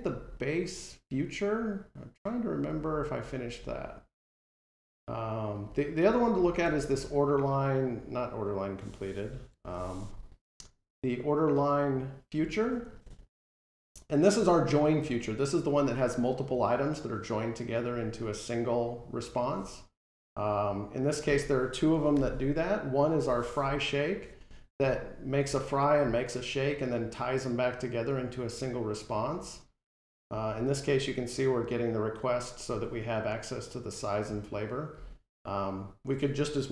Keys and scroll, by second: 9.4 alt+shift+F12, 22.0 alt+End.